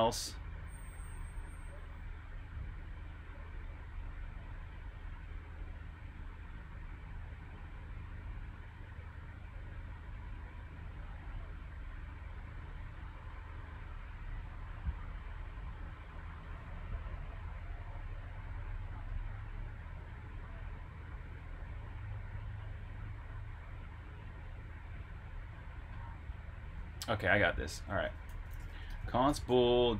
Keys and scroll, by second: 26.4-28.9 typing.